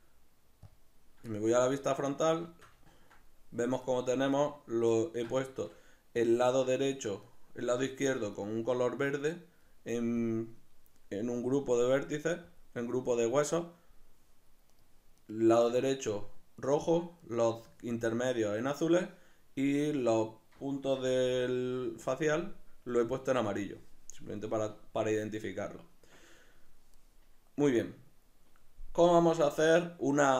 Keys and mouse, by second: 1.4-6.8 shift+middle drag, 6.8 right click, 8.4 right drag, 9.0 right click, 10.2-12.7 drag, 15.2 right click, 16.6 right click, 17.2 right click, 18.4 right click, 19.9 right click, 21.0 g, 22.2 right click.